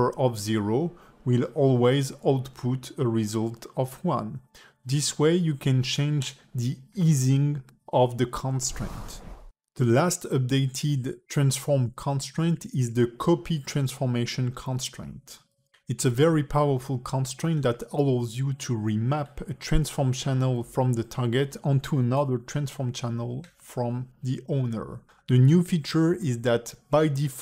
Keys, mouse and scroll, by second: 0.5 click, 0.9 s, 3.0 click, 3.9 click, 6.1 click, 6.6 s, 10.5 click, 11.6 shift+click, 12.2 ctrl+shift+c, 14.1 click, 15.0 click, 15.7 click, 17.3 click, 18.4-19.5 scroll down 1, 19.5 click, 19.5-20.3 scroll down 2, 20.7-21.6 scroll down 10, 21.6 click, 23.3 click, 23.7 g, 26.7 click.